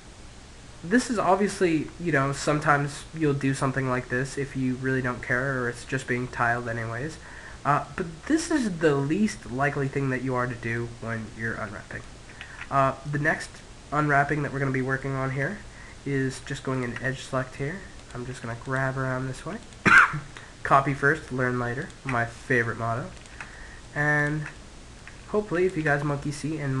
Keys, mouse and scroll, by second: 1.2-3.5 middle drag, 5.4-10.1 middle drag, 10.3-12.1 middle drag, 11.9 ctrl+z, 12.4-13.9 middle drag, 13.4 Tab, 16.2 click, 17.2 middle click, 17.5-19.7 right drag, 19.7-20.7 middle drag, 20.7 click, 20.7 right click, 20.9 middle click, 21.2-26.8 drag, 21.2-26.8 right drag.